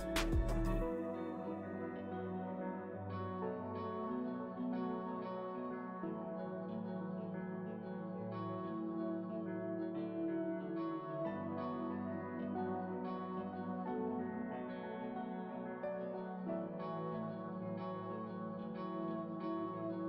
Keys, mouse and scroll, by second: 0.2-1.2 middle drag, 1.2-3.2 ctrl+drag, 3.2 p, 4.0-5.8 drag, 5.8-7.9 middle drag, 7.9 click, 8.5 f, 9.6-11.9 drag, 11.9-13.6 middle drag, 13.6 f, 14.3-16.0 middle drag, 16.0 p, 17.5 f, 18.5-19.5 drag, 19.5 middle click.